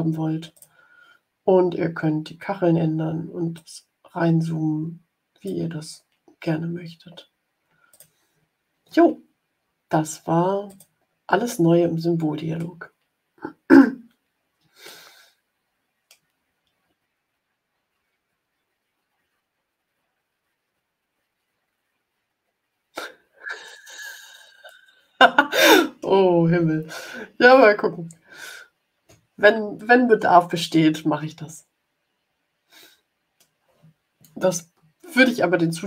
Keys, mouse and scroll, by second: 0.5 click, 3.5-5.6 drag, 7.8 click, 10.6 click, 12.5-13.9 middle drag, 14.8-16.2 drag, 21.8 ctrl+scroll up 2, 23.3-23.6 ctrl+scroll up 2, 24.6-26.0 middle drag, 26.8 ctrl+scroll down 2, 28.5 ctrl+scroll up 2, 29.7-31.4 drag, 31.4-33.5 middle drag.